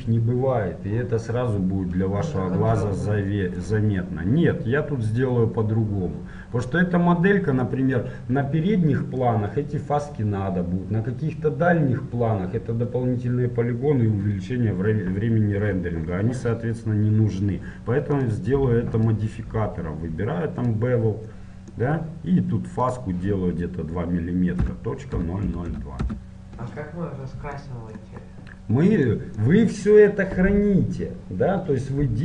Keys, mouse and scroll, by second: 0.0-3.8 middle drag, 3.8-20.8 right drag, 20.8 click, 21.6-26.2 middle drag, 26.2 KP_0, 28.0-32.2 middle drag.